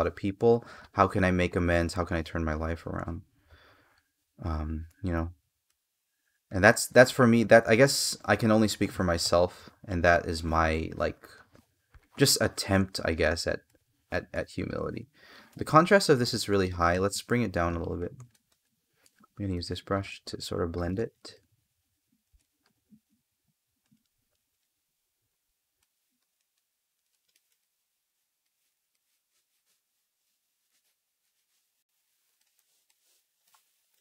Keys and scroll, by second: 8.9 space, 29.5 space, 32.2 space.